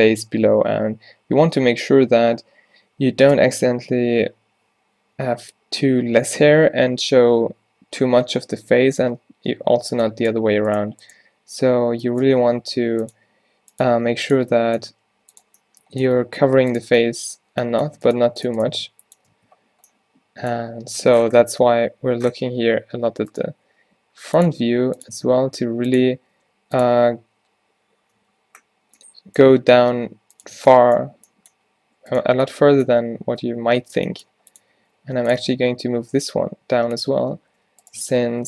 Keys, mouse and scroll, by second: 3.4 space, 5.2 z, 6.1 z, 7.2 z, 8.7 z, 9.6 z, 12.5 shift+d, 13.2 e, 13.9 e, 14.9 g, 16.1 g, 18.1-19.4 drag, 18.3 g, 18.7 g, 19.4 Tab, 21.7 z, 22.4 Tab, 22.7-25.2 typing, 26.8 g, 27.0 u, 28.7 z, 29.6 g, 30.6 Tab, 33.3 Tab, 33.6-35.5 typing, 37.3 Tab, 37.7 g, 38.0 Tab, 38.3 g.